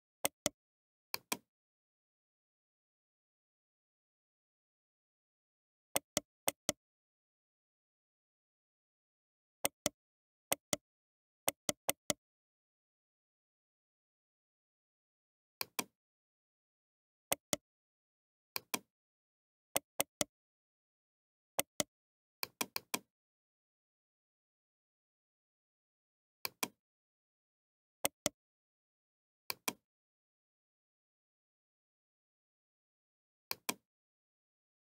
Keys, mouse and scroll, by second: 6.4-8.2 right drag, 8.2-9.7 middle drag, 9.7-15.6 right drag, 12.9 shift+d, 17.3-19.0 right drag, 19.0-20.9 drag, 19.9-24.0 right drag, 23.2-26.5 drag, 27.1 middle click, 28.0-29.7 right drag, 29.7-31.8 drag.